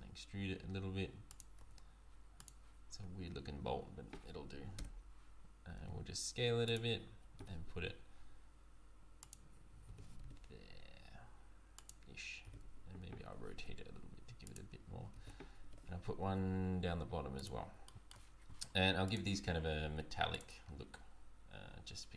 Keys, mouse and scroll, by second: 1.6 Tab, 2.4 click, 3.0 Tab, 4.8 l, 5.7 s, 7.4 g, 9.9 g, 12.4 r, 14.5 r, 15.1 shift+d, 17.8 shift+middle click, 17.8 shift+d, 19.0 click.